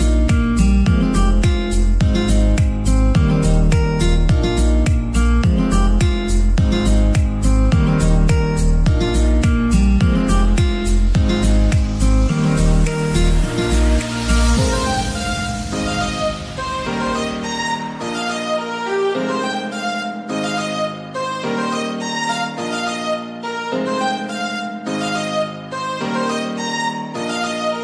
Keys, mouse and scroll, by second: 0.3 middle click, 0.6 s, 1.3 click, 1.8 s, 2.2 click, 2.4 g, 2.7 z, 3.2 click, 3.4-4.0 scroll up 3, 3.7-6.8 middle drag, 7.6 click, 8.2 middle click, 8.9 KP_1, 9.7-10.4 scroll down 4, 10.4-11.4 scroll up 3, 11.4 g, 11.8 click, 12.1 r, 13.7 click, 13.9 g, 15.2 click, 15.6 r, 16.1 click, 16.4 shift+d, 17.0 click, 17.1 r, 18.1 click, 18.2 g, 19.1 click, 20.0 scroll down 4, 20.5-24.7 middle drag, 24.7-27.7 drag.